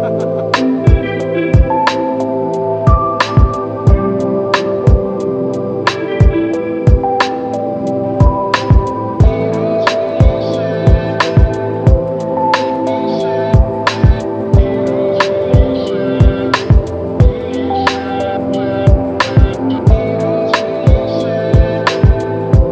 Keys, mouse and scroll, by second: 2.0 ctrl+click, 4.1 ctrl+click, 6.7 w, 12.7 ctrl+click, 14.3-15.1 scroll down 1.